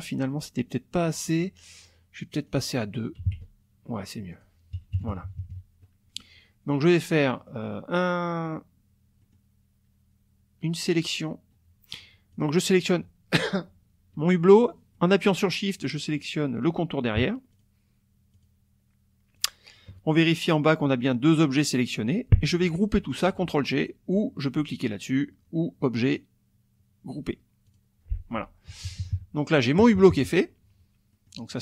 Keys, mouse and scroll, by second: 2.5 click, 3.2 KP_2, 3.3 KP_Enter, 4.3 click, 4.9 KP_Subtract, 7.4 click, 8.3 click, 9.2 click, 12.3 click, 14.9 click, 17.5 shift+click, 18.3 shift+click, 19.4 shift+click, 26.1 click, 27.7 click, 28.7 KP_Subtract, 29.8 KP_Subtract, 31.1 middle click.